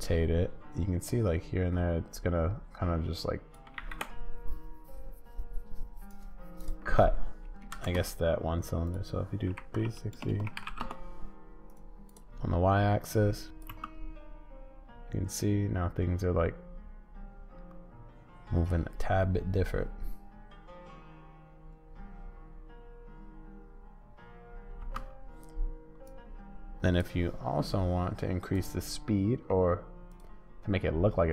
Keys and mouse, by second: 3.8 ctrl+z, 7.7 shift+Right, 9.0-11.7 drag, 10.2 BackSpace, 11.7 middle click, 13.1 click, 13.7 space, 24.8 space, 26.0 click.